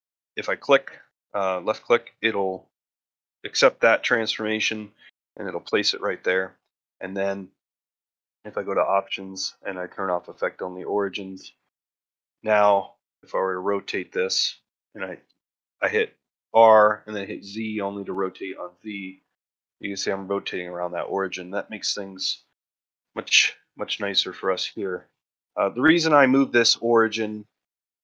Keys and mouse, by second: 1.5-1.8 middle drag, 2.0 shift+middle drag, 6.2 shift+middle drag, 6.7 ctrl+middle drag, 7.1 ctrl+middle drag, 8.6-10.0 drag, 10.6 middle click, 11.0 shift+middle drag, 11.2 ctrl+middle drag, 11.6 shift+middle drag, 12.0 middle drag, 12.8 ctrl+middle drag, 23.8-24.2 middle drag, 24.3 shift+middle drag, 24.8 ctrl+middle click, 25.1 shift+middle drag, 25.5 middle drag.